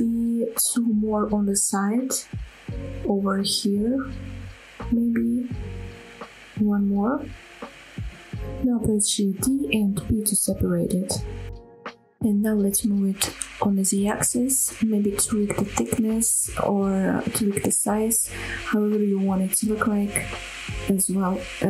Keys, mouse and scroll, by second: 0.1 shift+middle click, 0.6 scroll down 1, 0.8-2.2 middle drag, 2.2 scroll up 2, 2.5-3.6 shift+middle drag, 3.7 shift+middle click, 4.3 shift+click, 4.8 middle click, 5.8 middle click, 6.6 middle click, 7.1 middle click, 8.5 shift+click, 8.8 middle click, 9.5 shift+d, 9.7 right click, 10.6 p, 11.6 Tab, 12.1 click, 12.4 middle click, 12.8 g, 12.9 z, 13.7 shift+click, 13.8 middle click, 13.9 scroll up 1, 14.2 shift+click, 15.1 scroll up 1, 15.1 middle drag, 15.3 scroll down 2, 15.4 middle click, 15.8 shift+middle click, 16.0 middle drag, 16.2 scroll up 1, 16.3 middle drag, 16.8-20.5 typing, 17.2 click, 17.3 shift+middle click, 18.0 click, 18.6 click, 18.9 scroll up 1, 19.0 shift+middle click, 19.8 shift+click, 20.3 click, 21.0 click, 21.0 middle drag, 21.4 scroll down 1, 21.4 middle click, 21.6 Tab.